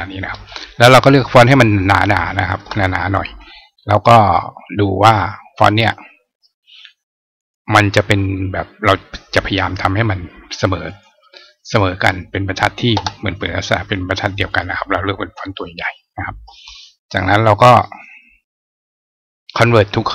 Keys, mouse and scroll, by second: 1.1 click, 1.9 click, 7.2 click, 10.7 click, 12.3 click, 14.3 click, 15.3 click, 17.5 click.